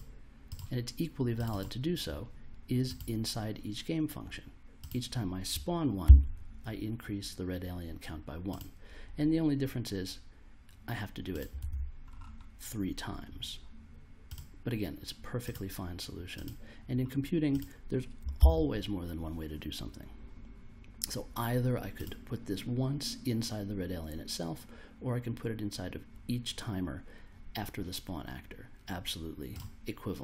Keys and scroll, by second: 6.0 super+v, 11.5 super+v, 18.4 super+v.